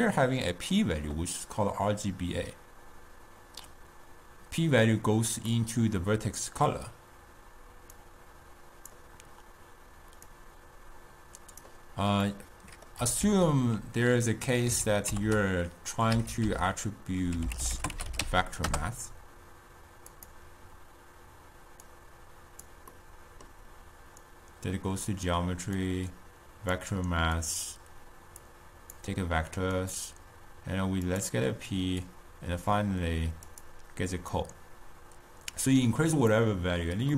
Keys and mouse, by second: 0.0-3.0 middle drag, 6.1-8.1 middle drag, 8.1-12.5 drag, 12.5-13.5 middle drag, 13.5 ctrl+a, 15.5 t, 22.1-23.4 drag, 23.4 middle click, 24.4 click, 26.0 click, 27.6-37.1 drag.